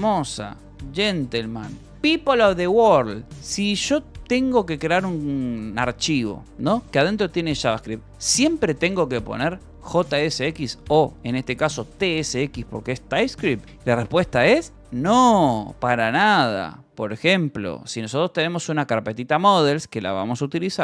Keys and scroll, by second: 4.4-7.3 typing, 8.9 v, 9.5 e, 11.9 Escape, 15.3 Escape, 16.4-19.1 typing, 19.5 Escape, 19.9 Return, 20.3 y.